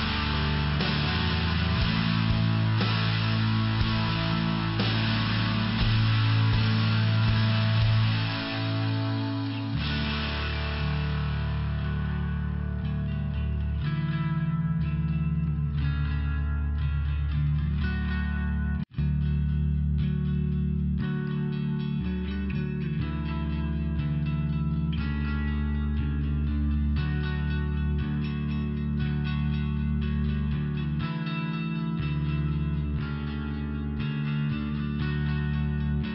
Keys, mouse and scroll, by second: 0.6-1.3 scroll down 1, 1.3 click, 1.4 click, 1.5 click, 1.8 double click, 4.1 click, 4.1 click, 5.1 click, 5.2 click, 5.5 click, 5.6 click, 5.8 click, 5.9 double click, 6.7 BackSpace, 7.7 4, 7.9 4, 8.3 Return, 11.4 click, 11.6 click, 12.9 click, 15.0 click, 15.0 click, 16.8 click, 17.0 click, 17.0 click, 18.3 click, 18.8 click, 19.1 click, 20.3 click, 23.0 click, 23.2 click, 24.5 click, 24.7 click, 26.5 click, 27.1 click, 28.3 click, 28.6 click, 28.9 click, 30.6 click, 30.6 click, 31.0 click, 31.1 click, 32.4 click, 34.2 click, 34.3 click.